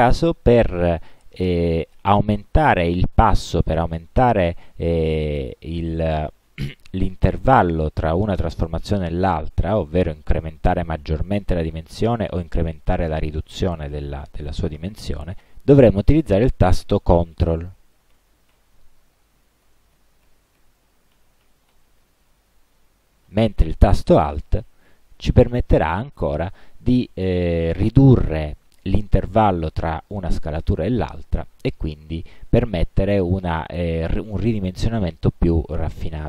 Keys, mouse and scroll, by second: 18.2 ctrl+., 19.7 ctrl+,, 21.2 ctrl+., 22.6 ctrl+,, 23.3 ctrl+., 24.7 alt+., 27.9 alt+,, 32.3 alt+..